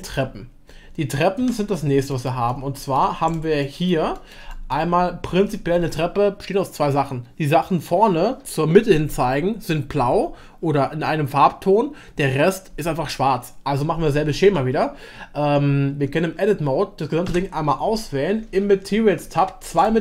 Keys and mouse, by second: 0.0-1.4 drag, 2.1 middle drag, 2.5-3.0 shift+middle drag, 3.6-4.0 middle drag, 4.1 shift+drag, 4.3-4.7 shift+middle drag, 14.5 Tab, 17.2 Tab, 17.5 a, 19.6 click.